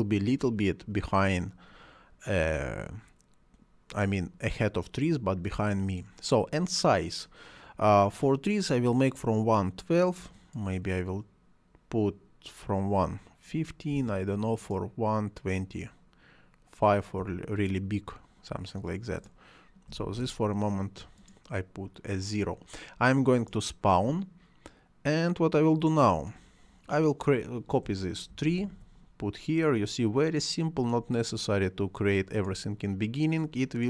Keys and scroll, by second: 13.9 5, 17.1 5, 19.8 0, 20.1 Return, 28.2 ctrl+c, 28.5 ctrl+v.